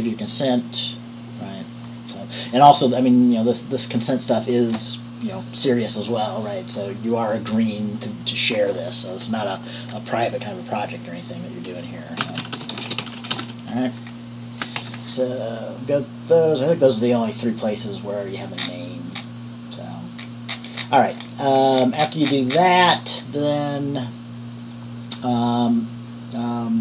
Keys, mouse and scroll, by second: 1.1-2.6 drag, 12.3-14.1 typing, 14.7 click, 15.0 ctrl+s, 19.3 scroll down 1, 21.3-22.7 scroll down 1.